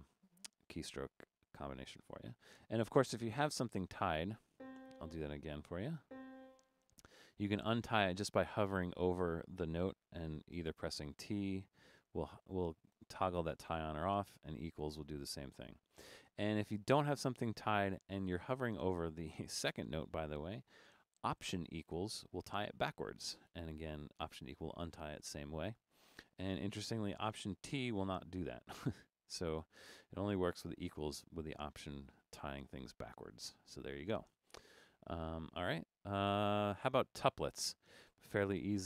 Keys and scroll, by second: 2.0 BackSpace, 2.6 BackSpace, 4.9-6.2 typing, 6.9 Left, 7.3 Left, 8.5 Right, 8.8 Left, 10.7-11.2 typing, 12.5-12.9 typing, 14.4-15.6 typing, 18.0 Right, 21.9 alt+=, 28.3 alt+t, 28.9 alt+t, 30.4 alt+=, 31.1 alt+=, 35.5 Right, 35.9 Right.